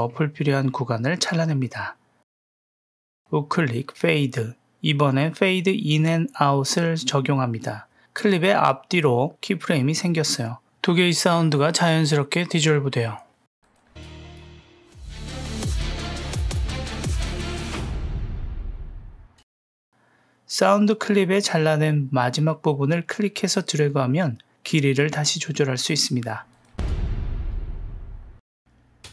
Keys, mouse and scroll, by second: 1.1 w, 1.5 click, 2.1 Delete, 2.9-4.3 right drag, 13.8 space, 19.2 space, 19.7 click, 20.1 g, 22.6-25.2 drag, 26.5 click, 26.8 space, 28.6 shift+Left, 29.0 space.